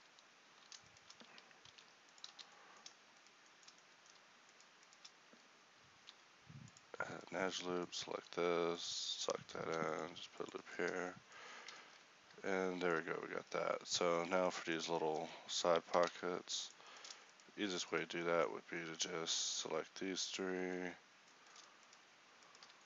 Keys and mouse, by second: 0.6 z, 1.7 alt+m, 2.3 z, 6.0 ctrl+b, 8.2 alt+s, 10.5 Tab, 11.8 KP_1, 13.4 Tab, 16.1 ctrl+Tab, 19.2 ctrl+b.